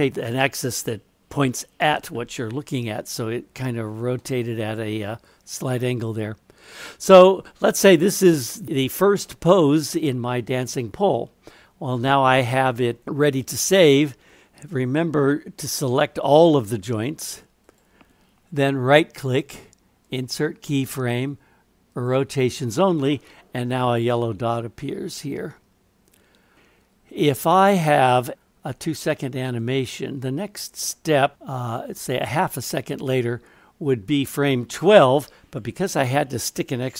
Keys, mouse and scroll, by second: 4.2 middle click, 13.4-14.8 drag, 17.7-22.1 right drag, 29.6-35.6 drag.